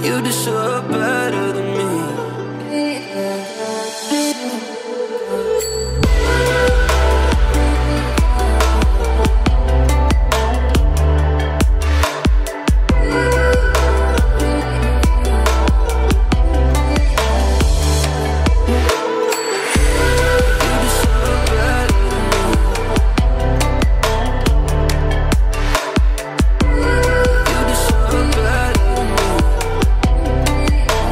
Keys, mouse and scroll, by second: 0.2 alt+scroll up 1, 1.1-1.5 alt+scroll down 1, 2.3-2.7 alt+scroll up 1, 2.7 click, 2.9 space, 3.0-3.4 click, 3.3 space, 4.1 click, 5.0 Return, 5.8 alt+scroll up 1, 8.1 alt+click, 8.5 space, 8.5-9.0 click, 21.7 space, 21.9 click, 22.0 space, 22.4-22.9 alt+scroll down 2, 22.9-23.3 alt+scroll up 2, 23.3-24.3 alt+scroll down 2, 24.3 alt+scroll up 1, 25.7-26.8 alt+scroll up 1, 26.8-27.5 alt+scroll down 2, 27.5 alt+scroll up 2, 29.2 right click, 29.7-31.1 drag.